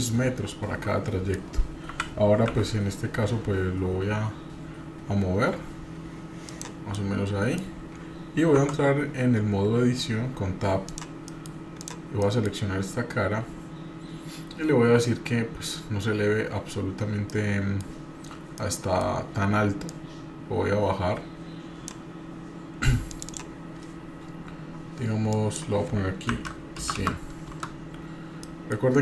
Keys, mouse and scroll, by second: 1.9 g, 7.0 middle click, 8.6 Tab, 10.9 click, 11.3 middle click, 11.8 click, 12.2 middle click, 17.1 scroll down 1, 17.3 middle click, 18.0 scroll up 1, 18.6 middle click, 19.8-21.9 drag, 23.1-28.0 drag, 27.0 KP_0, 28.5 middle click, 28.9 scroll up 1.